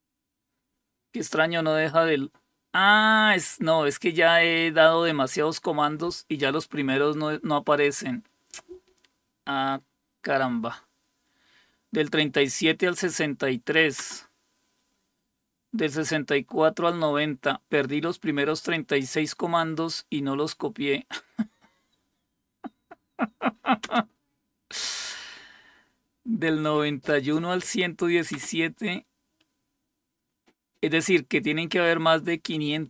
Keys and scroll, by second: 23.8 space.